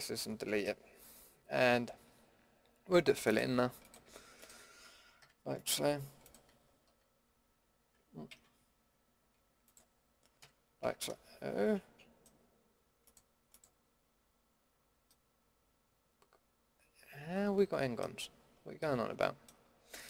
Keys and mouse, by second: 5.2 f, 6.9 d, 8.3 ctrl+z, 10.4 f, 10.8 a, 15.1 middle click, 18.1-19.4 middle drag.